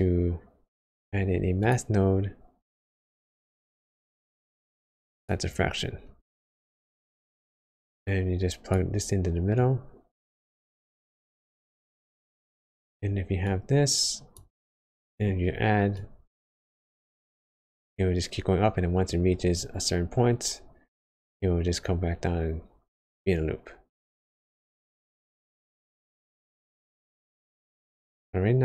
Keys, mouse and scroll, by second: 3.1 click, 6.1-6.6 scroll up 7, 6.7 middle click, 7.6 click, 9.5 click, 14.9 middle click, 15.3 scroll up 1, 15.9 click, 20.9 click, 25.1 scroll up 1, 25.8 scroll down 1, 26.4 click.